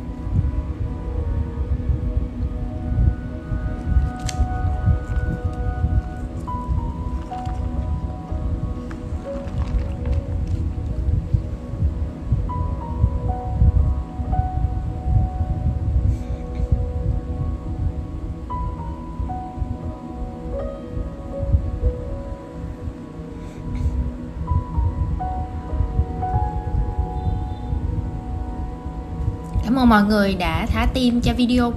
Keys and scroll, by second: 1.2 super+{, 1.4 super+c, 1.7 shift+super+v, 1.8 super+a, 2.9 super+3, 4.5 super+g, 7.9 super+g, 8.7 super+z, 11.8 super+g, 16.5 super+z, 18.0 super+x, 22.4 super+g, 26.6 super+c, 27.2 super+a, 28.3 shift+super+v, 28.3 super+{.